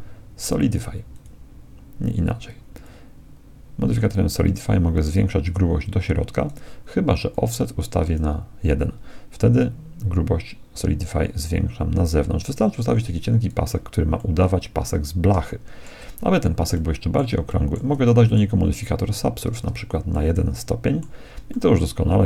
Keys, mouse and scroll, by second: 2.8-4.6 drag, 7.3-9.0 drag, 9.6-11.4 drag, 14.2-19.8 middle drag, 19.1 ctrl+1, 20.2-22.2 middle drag.